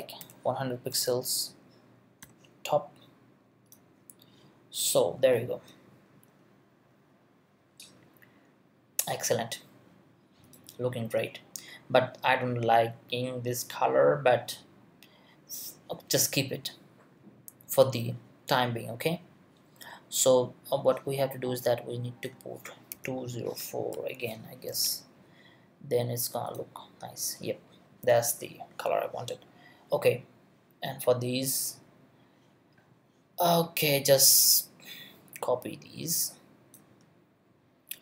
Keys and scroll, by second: 0.0-1.6 typing, 22.9 2, 23.9 Right, 24.7 4.